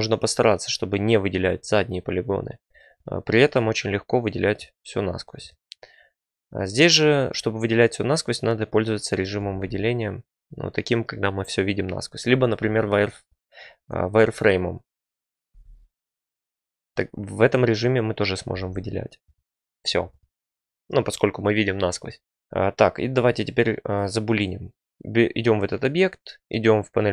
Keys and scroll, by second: 9.4 alt+z, 12.6 F3, 15.5 z, 18.5 z, 23.2 Tab.